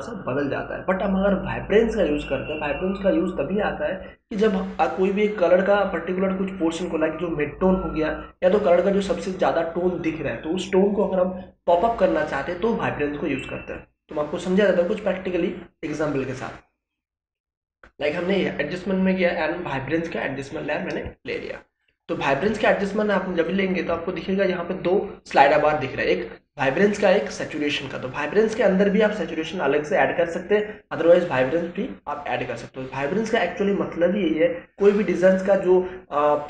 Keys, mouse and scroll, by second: 18.0 click, 21.0 space, 21.3-23.4 ctrl+drag.